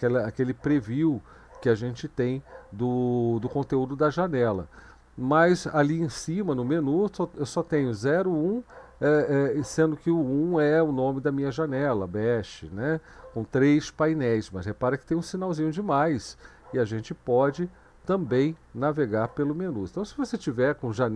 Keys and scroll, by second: 16.0 ), 17.5 Down, 17.7 Down, 17.9 Down, 18.3 Up, 18.5 Up, 19.0 Down, 19.2 Down.